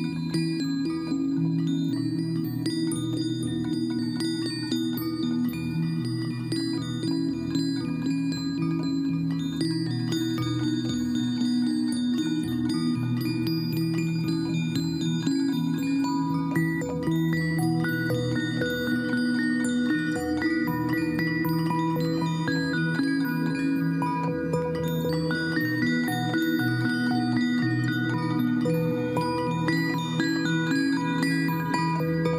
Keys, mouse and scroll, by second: 11.9 Left, 12.6 Left, 12.8 Left, 13.0 Down, 13.2 Right, 13.4 Right, 14.1 Down, 14.3 Down, 14.4 Down, 14.5 Left, 15.0 Right, 15.2 Down, 15.3 Right, 15.6 Down, 15.8 Left, 16.1 Down, 16.3 Left, 17.5 ctrl+t, 28.3 right click, 29.0 right click.